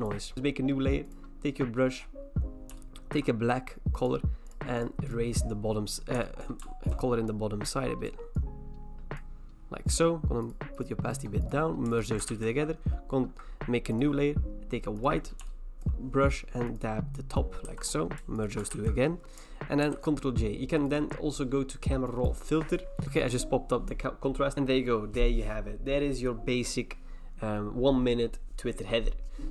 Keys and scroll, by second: 12.3 ctrl+e, 17.7 v, 18.7 ctrl+e, 19.8 ctrl+j, 23.0 ctrl+e.